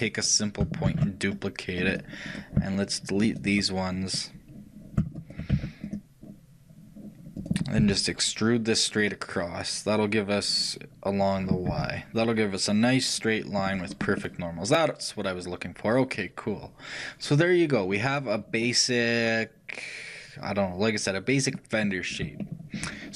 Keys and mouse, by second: 1.0 shift+d, 2.6-4.2 shift+drag, 4.2-8.4 right drag, 5.6 shift+x, 8.4-13.7 shift+drag, 14.1-16.2 middle drag, 22.5-23.1 shift+middle drag.